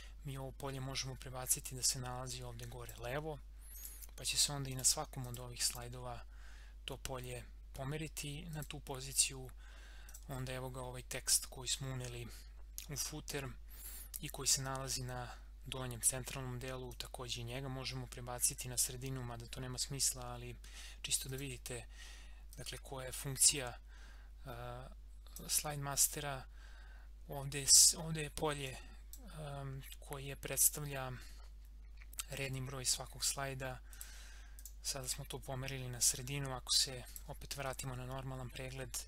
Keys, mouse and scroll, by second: 8.5 click, 16.9-20.9 drag, 21.3-27.8 drag, 28.6-31.5 drag, 33.9 click, 35.7 scroll down 1, 37.0 click.